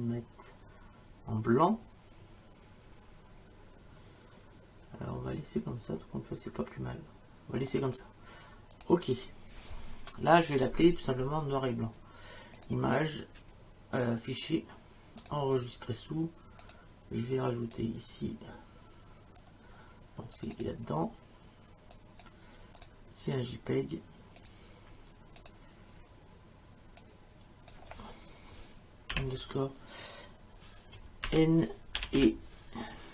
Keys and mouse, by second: 8.7 click, 12.6 click, 15.2 click, 16.6 click, 17.8 click, 20.4 click, 21.9 click, 24.4 click, 27.0 click, 29.1 8, 31.3-33.1 typing.